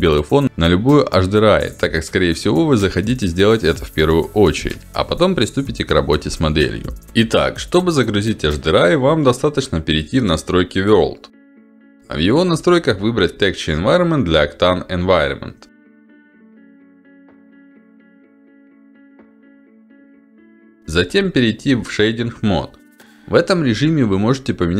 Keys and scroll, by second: 20.6 ctrl+alt+d, 23.7 Escape.